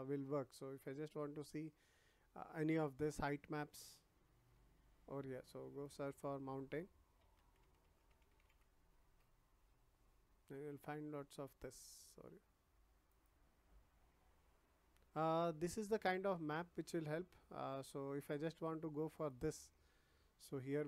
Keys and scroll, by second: 7.1-8.4 typing, 9.0 Return.